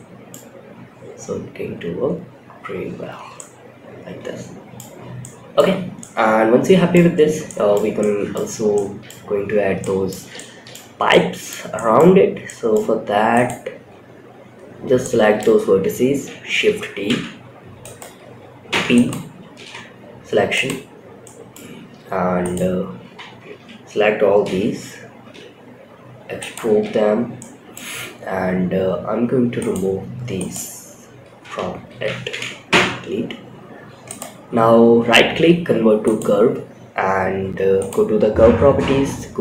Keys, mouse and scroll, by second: 2.5 space, 2.7-4.1 middle drag, 4.3 scroll down 1, 4.4 scroll up 1, 4.5-4.9 middle drag, 5.0 scroll up 2, 5.3-6.2 middle drag, 6.4 scroll up 2, 6.8-7.1 shift+middle drag, 7.3-7.6 middle drag, 8.1-8.4 shift+middle drag, 9.1 middle click, 9.7-10.0 shift+middle drag, 10.4-10.8 middle drag, 11.0 middle drag, 11.8-12.1 middle drag, 12.6 click, 13.0 Tab, 13.9 scroll down 2, 14.3 shift+middle click, 16.4 shift+d, 18.0 p, 18.9 Tab, 19.8 click, 20.6 middle click, 21.7 click, 22.3 Tab, 22.7 a, 23.7 e, 26.0 Tab, 26.4 scroll down 2, 26.7-27.1 middle drag, 28.9 click, 29.7 click, 30.7 d, 32.0 Delete, 32.9-33.4 scroll up 3, 33.4-35.5 right drag, 36.0-36.4 scroll down 3, 37.1 click, 37.4-38.7 scroll down 4, 38.7 click, 38.9-39.3 scroll down 2.